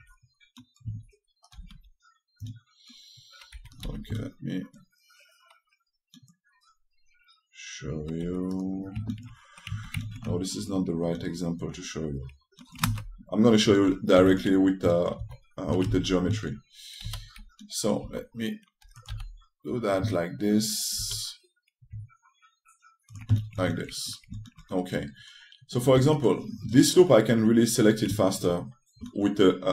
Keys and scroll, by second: 2.3 w, 4.2 2, 8.9 2, 17.7 e, 26.6 2.